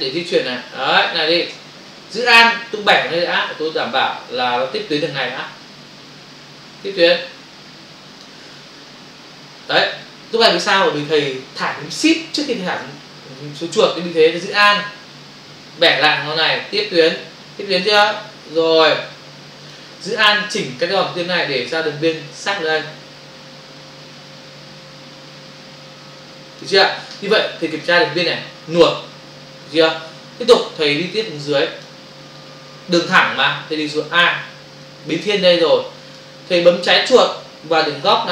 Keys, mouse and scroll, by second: 15.9 alt+click, 20.9 alt+click, 30.8 space, 34.2 space.